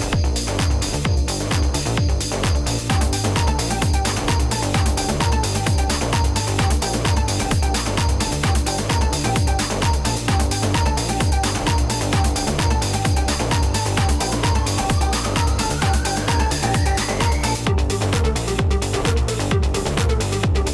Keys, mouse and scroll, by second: 3.1 click, 8.4 click, 13.9 click, 15.6-20.7 drag.